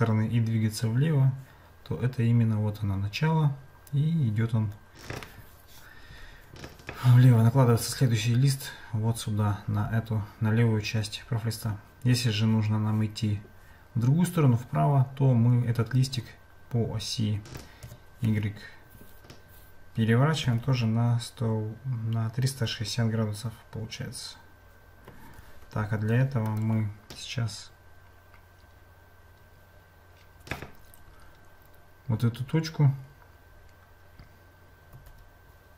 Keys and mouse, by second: 26.4-28.8 right drag, 35.0 Tab.